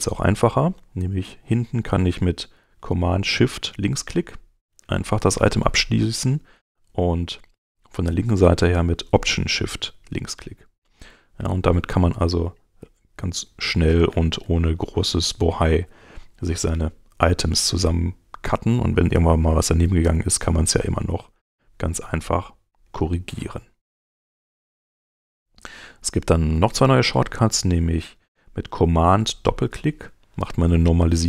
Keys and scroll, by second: 25.9 super+Tab, 29.3 super+Tab.